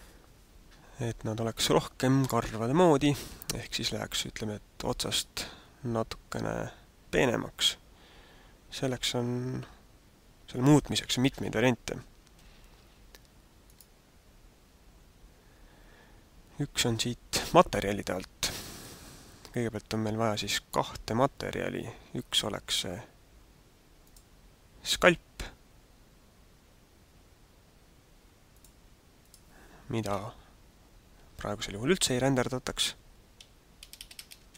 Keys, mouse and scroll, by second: 12.4 Escape, 13.9 right click, 18.9 click, 23.9 click, 28.6 click, 29.2 click.